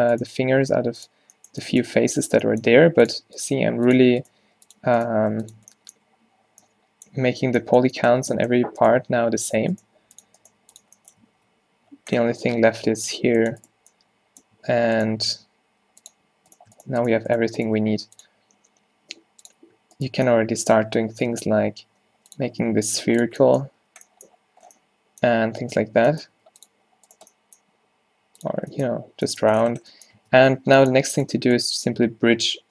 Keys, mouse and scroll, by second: 0.0 z, 0.4 g, 0.5 click, 2.0-5.6 typing, 9.2 g, 10.0 g, 10.6 g, 11.4 ctrl+r, 14.7 a, 17.8 x, 21.4 alt+shift+s, 22.6 s, 23.8 Tab, 25.4 Tab, 25.8 q, 26.4 s, 26.8 g, 27.8 g, 28.7 Tab, 30.3 Tab.